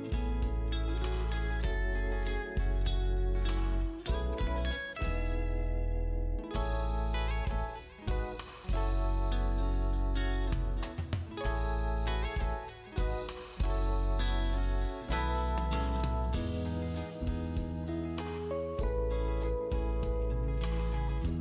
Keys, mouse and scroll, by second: 1.5 space, 2.6 click, 3.5 ctrl+click, 5.1 space, 5.5 scroll up 1, 6.8 click, 8.7 right click, 11.7 click, 15.9-16.6 scroll up 1, 16.6 click, 18.4-19.1 scroll down 1, 20.4 scroll up 1, 21.2 click.